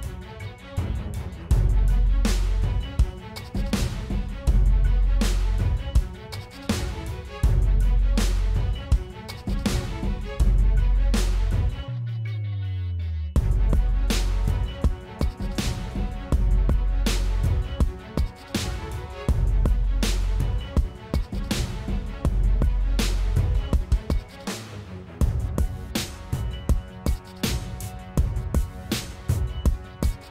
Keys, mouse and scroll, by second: 0.6 middle click, 1.8 middle click, 2.1 middle click, 2.6 middle click, 3.6 middle click, 4.5 middle click, 5.2 middle click, 5.4 middle click, 5.8 middle click, 6.2 middle click, 6.9 middle click, 7.7 middle click, 8.4 middle click, 8.5 middle click, 8.9 middle click, 9.1 middle click, 9.6 middle click, 10.3 middle click, 11.4 middle click, 12.9 middle click, 13.7 middle click, 14.4 middle click, 16.8 middle click, 17.5 middle click, 17.8 middle click, 20.5 middle click, 20.7 middle click, 23.1 middle click, 25.1 middle click, 26.5 middle click, 28.4 middle click.